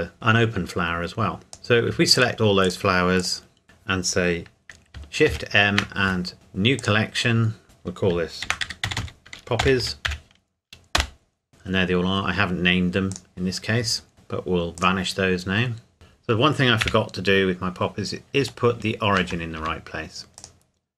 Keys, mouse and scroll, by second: 0.1 Tab, 1.9 click, 2.2 shift+click, 3.6 Escape, 5.3 shift+m, 6.8 click, 8.4-10.1 typing, 11.0 Return, 11.5 click, 13.1 click, 13.9-14.8 scroll down 1, 14.8 click, 15.9 KP_Decimal, 16.9 KP_1, 17.6-18.4 scroll down 1, 18.4-19.2 shift+scroll up 1, 19.6 Tab, 20.4 click.